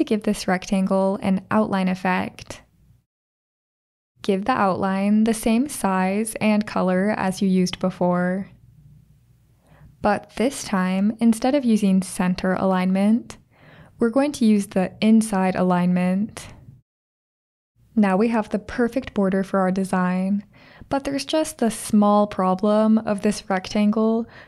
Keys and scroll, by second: 1.2-3.7 typing.